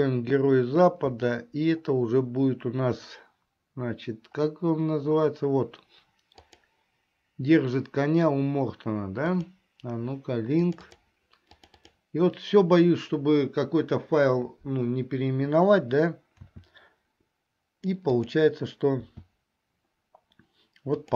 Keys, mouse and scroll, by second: 16.5 s, 19.0 s.